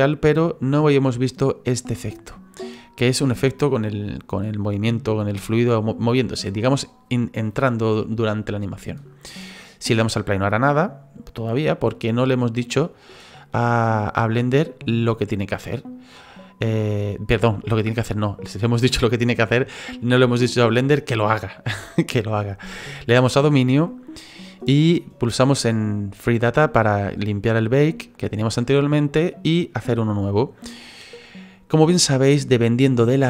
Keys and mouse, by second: 10.2 click, 10.8 middle click, 13.0 click, 13.6 click, 23.1 right click, 26.7 click, 29.5 click.